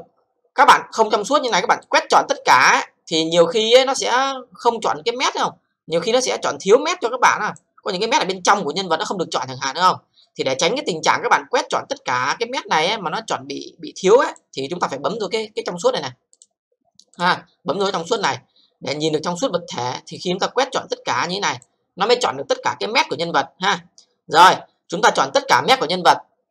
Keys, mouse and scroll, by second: 1.8 click, 2.6 c, 6.0 click, 7.6 c, 7.9-10.1 scroll up 3, 10.9-12.3 scroll down 4, 12.3 click, 14.3 c, 16.3 click, 17.2 click, 17.8 click, 18.2 click, 18.3 c, 20.2 click, 21.6 c.